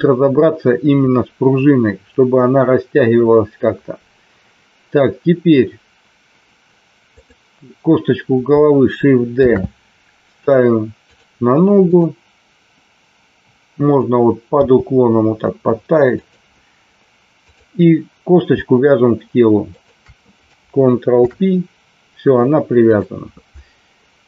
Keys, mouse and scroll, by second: 7.1 click, 9.3 shift+d, 11.7 click, 14.6 g, 16.1 click, 17.3 click, 19.6 shift+click, 21.2 ctrl+p.